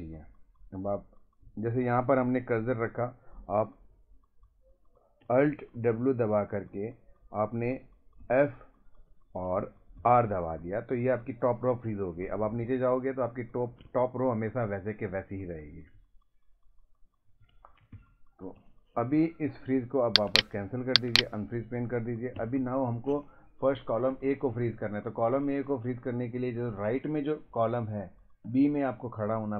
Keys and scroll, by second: 5.7 w, 8.2 f, 10.0 r, 12.2 Down, 13.4 Down, 16.0 Up, 17.4 ctrl+Up, 17.9 Down, 22.3 Right, 22.4 Left, 22.6 Up, 24.1 Right, 24.7 Left, 28.5 Right.